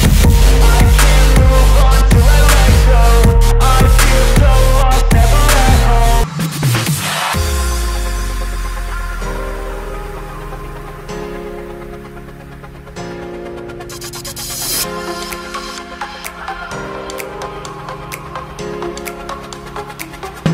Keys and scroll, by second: 0.0-2.0 typing.